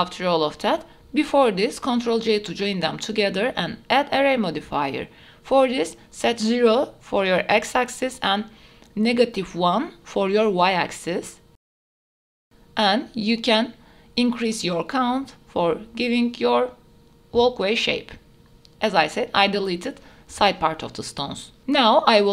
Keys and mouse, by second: 0.9 r, 1.3 click, 1.4 g, 1.7 middle click, 1.9 shift+drag, 2.3 ctrl+j, 2.5 middle click, 2.6 ctrl+a, 2.9-3.2 drag, 3.9-4.8 drag, 6.2 click, 7.4-8.5 drag, 10.3-12.6 drag, 13.8 click, 13.9 click, 14.0 middle click, 14.4 KP_0, 16.0 middle click, 17.7 Delete, 17.7-18.6 drag, 19.4 middle click, 19.8 shift+middle click, 20.9 shift+middle click, 21.1 ctrl+s.